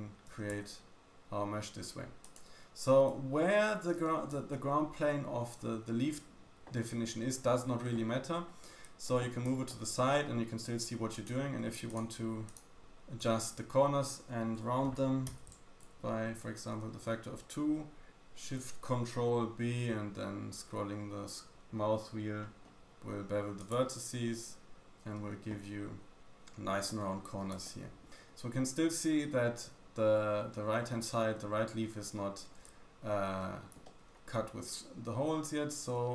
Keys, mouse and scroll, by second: 0.4 g, 4.5 shift+middle click, 8.2-9.5 scroll up 1, 9.5-10.1 shift+middle drag, 11.1 click, 11.8 shift+middle click, 11.9 shift+click, 12.0 shift+middle click, 12.5 shift+click, 12.6 shift+middle click, 12.8 shift+click, 14.8-17.8 ctrl+shift+drag, 16.6 ctrl+shift+b, 26.3 Tab, 26.9-27.6 scroll down 1, 27.6-28.1 shift+drag, 27.6 middle click, 27.6 shift+middle click, 28.2 scroll up 2, 30.8-31.3 scroll down 3, 31.8-32.7 scroll down 2, 33.4 middle click, 33.8 shift+middle click, 33.8 shift+scroll down 1, 34.0-35.0 scroll up 4.